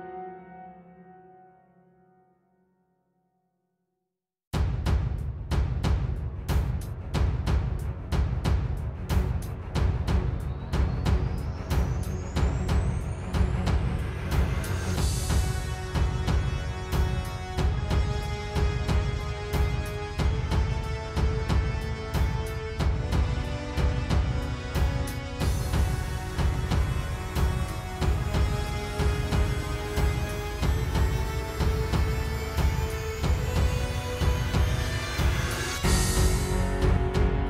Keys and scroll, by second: 0.5 ⟲, 0.8 super+j, 3.9 space, 5.4 space, 8.8 space, 8.9 space, 14.8-16.0 typing, 20.0 space, 21.7 space, 22.6 space, 23.3 space, 23.5 space, 24.8 space, 27.1 space, 28.3 shift+super+i, 30.3 super+j, 31.0 super+z, 32.4 super+j.